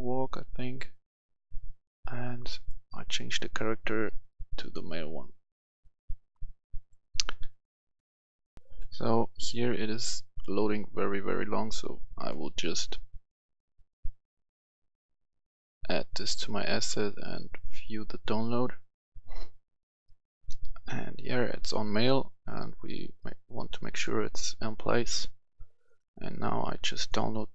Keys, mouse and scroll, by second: 2.5 click, 8.5 F11, 8.6 F10, 12.1 click, 17.8 click.